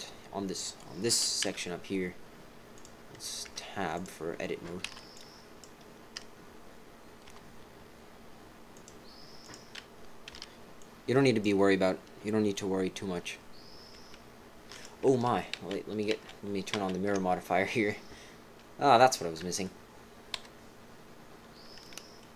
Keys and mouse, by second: 1.4 z, 3.5 Tab, 3.9 click, 4.8 b, 7.2 g, 9.4 click, 10.3 b, 13.9 g, 15.1 ctrl+z, 15.5 ctrl+z, 16.7 ctrl+z, 17.0 ctrl+z, 19.4 KP_3, 20.3 KP_1, 21.9 middle click.